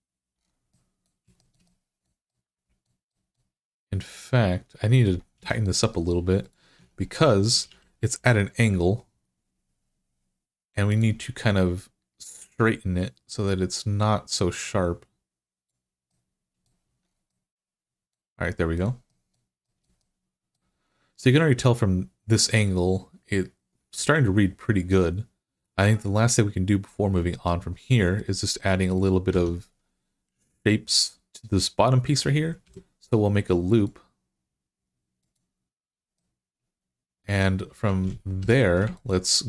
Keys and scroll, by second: 6.6 Tab, 7.5 w, 16.7 Tab, 29.1 Tab, 32.5 ctrl+r, 38.2 3.